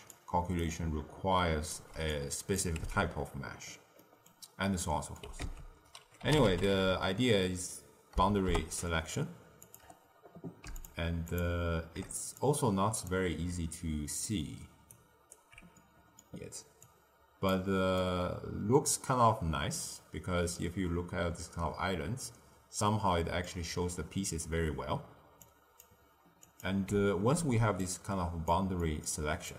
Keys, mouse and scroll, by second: 0.0-0.4 d, 0.5 right click, 1.7 d, 1.8 d, 2.0 click, 2.7 x, 3.9 middle click, 4.4-4.8 scroll down 2, 4.8 middle click, 5.3 ctrl+a, 10.7 ctrl+shift+click, 11.3 ctrl+shift+click, 12.3 click, 14.8-15.7 alt+right drag, 15.7-16.8 middle drag, 16.8 drag, 17.9-20.9 middle drag, 25.4 click, 26.4 click, 27.3 ctrl+x, 27.8 click, 28.7 middle click, 29.4 click.